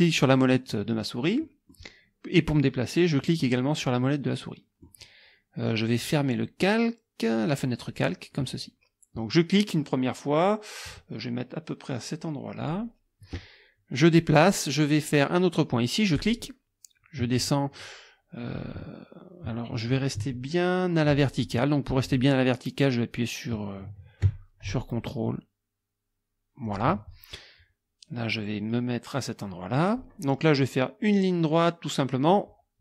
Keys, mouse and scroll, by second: 1.3 click, 3.4-5.0 drag, 7.9 click, 12.6 click, 16.2 click, 26.7 ctrl+click, 29.7 click.